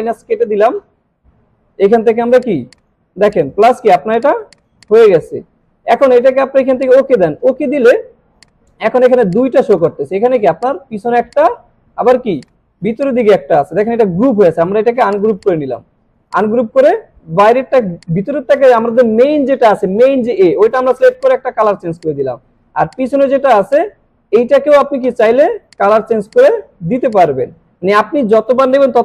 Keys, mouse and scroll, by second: 2.4 click, 5.0 click, 6.8 click, 12.4 click, 13.0 right click, 15.1 click, 21.2 click.